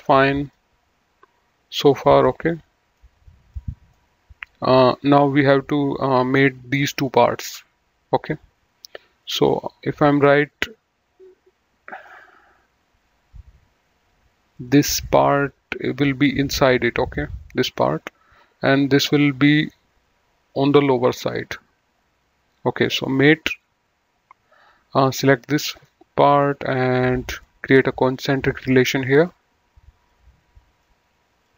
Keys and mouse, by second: 0.5 middle click, 2.2 middle click, 3.5 middle click, 9.2 click, 9.6 middle click, 14.5 click, 17.6 click, 22.9 click, 24.9 click, 25.8 middle click, 27.1 click, 29.1 click, 31.4 click.